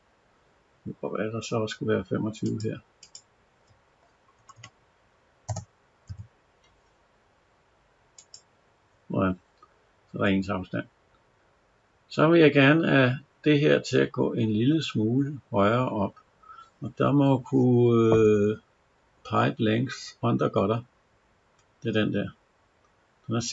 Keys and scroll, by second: 4.2 Left, 5.3 BackSpace.